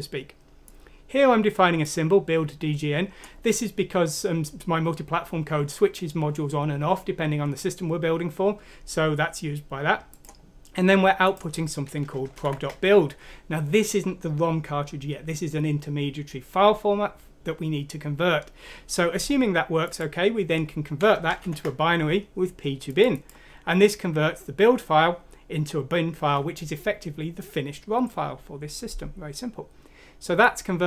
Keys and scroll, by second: 12.4 End, 21.4 Home.